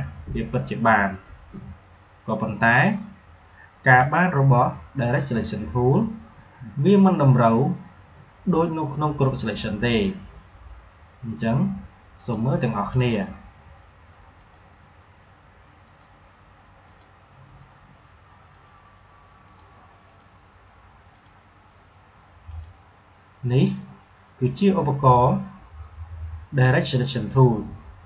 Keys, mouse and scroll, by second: 11.3-12.8 drag, 19.0 click.